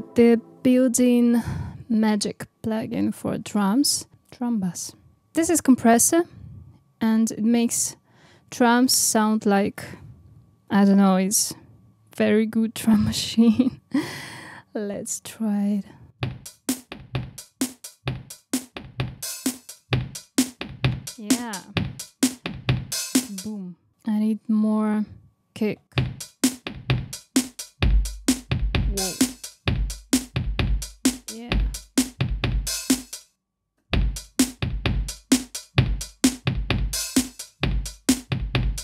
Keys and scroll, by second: 33.6 space.